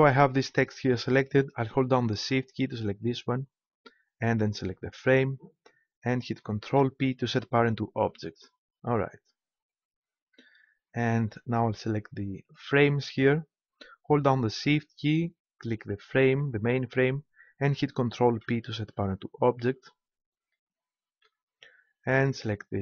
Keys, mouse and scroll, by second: 3.0-6.7 right drag, 6.7 ctrl+p, 10.3-12.5 middle drag, 12.5-14.3 right drag, 15.8-17.6 right drag, 18.2 ctrl+p, 20.5-22.8 drag.